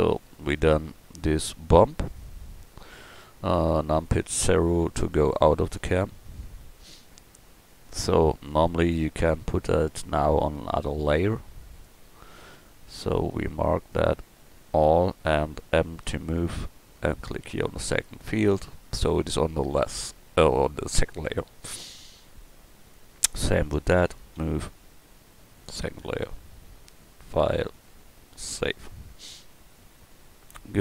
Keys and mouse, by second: 2.1 click, 4.1 KP_0, 5.5-6.2 middle drag, 6.4 middle click, 16.0 m, 22.8-24.1 right drag, 24.4 m, 27.7-29.3 middle drag.